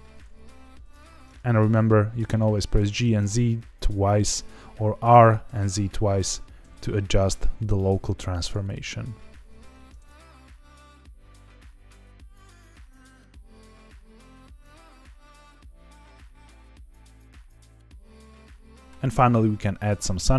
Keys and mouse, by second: 0.3 g, 0.7 z, 0.9 z, 2.8 click, 4.3-6.6 typing, 8.4 click, 8.6 s, 9.6 Escape, 10.8 r, 11.0 click, 11.1 s, 11.7 Escape, 12.0 alt+d, 12.2-13.3 typing, 12.7 click, 14.7 shift+click, 15.8 g, 15.9 z, 16.0 z, 16.6 click, 16.9 click, 17.2 alt+d, 17.3 r, 18.0 click, 18.7 click, 18.7 s.